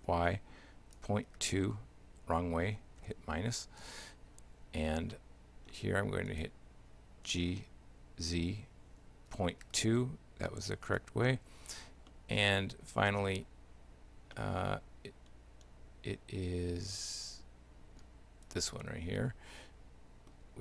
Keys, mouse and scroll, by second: 5.2 shift+middle click, 6.3 right click, 7.3 g, 12.1 shift+middle click, 14.5 shift+middle click, 18.5 right click, 18.9 shift+middle click.